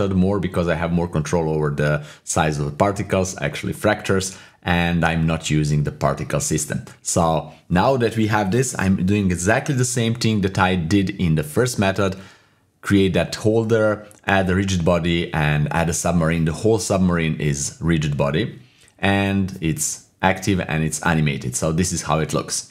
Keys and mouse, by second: 1.3 /, 2.2 /, 2.6 middle click, 3.3-5.1 middle drag, 5.5 click, 5.9 KP_7, 7.6 click, 7.9-10.8 typing, 9.0 Tab, 9.6 click, 10.0 Tab, 11.4 click, 11.8 click, 12.8 click, 13.8 middle click, 21.4-22.7 drag.